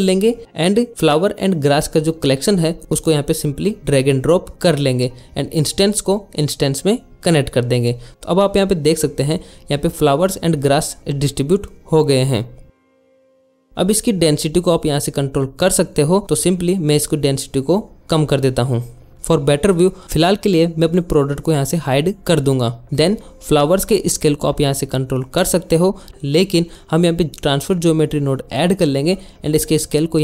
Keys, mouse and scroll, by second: 3.2 click, 4.5 click, 7.2 click, 8.2 click, 9.3 middle click, 9.5 shift+middle click, 10.6 middle click, 12.8 shift+middle click, 13.0 shift+middle click, 16.6-18.2 drag, 19.3 middle click, 20.6 middle click, 21.1 middle click, 21.8 middle click, 24.0 click, 26.1 ctrl+z, 26.2 click, 26.8 shift+a, 27.8 click.